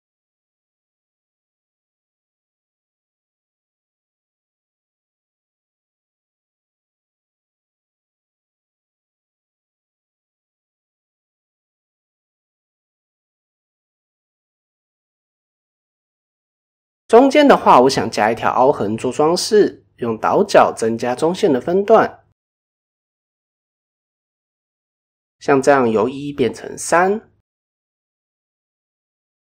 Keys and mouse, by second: 0.2 ctrl+r, 1.4-1.9 middle drag, 2.1-2.6 middle drag, 2.8 Tab, 2.9-4.1 middle drag, 4.5-4.9 middle drag, 5.1 shift+middle drag, 5.4 Tab, 5.8-6.2 middle drag, 6.4-6.7 middle drag, 8.7 click, 9.1 shift+middle click, 10.7 g, 12.2 g, 13.0 click, 13.2 g, 14.3 middle click, 15.4 click, 15.7 middle click, 17.0 shift+middle click, 18.3 shift+middle click, 19.9 ctrl+b, 26.4 middle click, 28.5 click.